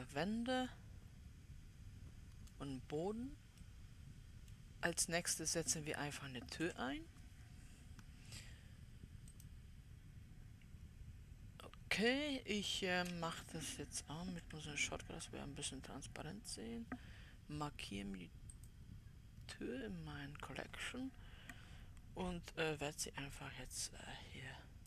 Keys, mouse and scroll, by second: 3.5-4.2 scroll down 4, 4.2-7.1 middle drag, 7.1 KP_7, 9.8-12.4 drag, 12.4-14.9 scroll up 3, 14.9 w, 19.0-22.0 drag, 24.0-24.8 drag.